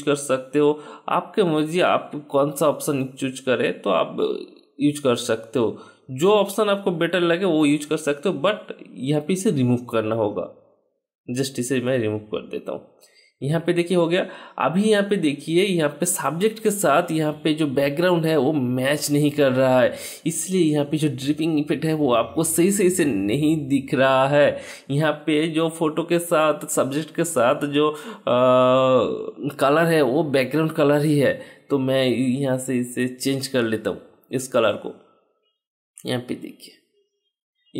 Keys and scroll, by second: 9.8 ctrl+Return, 10.4 Delete, 11.6 ctrl+d.